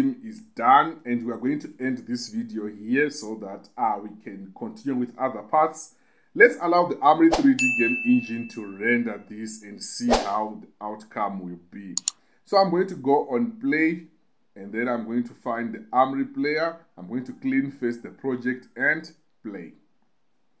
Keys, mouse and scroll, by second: 13.3 click, 17.2 click, 19.2-20.6 drag.